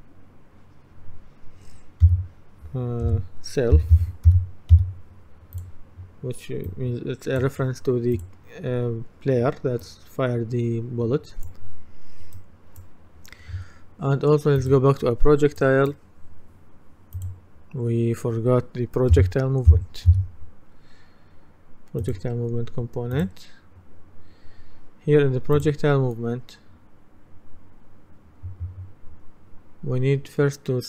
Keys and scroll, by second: 3.1-5.3 typing, 19.2-20.2 typing.